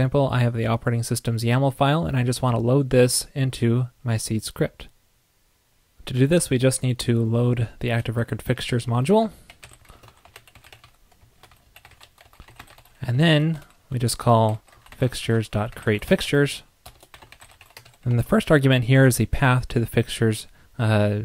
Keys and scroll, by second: 13.2 super+Down.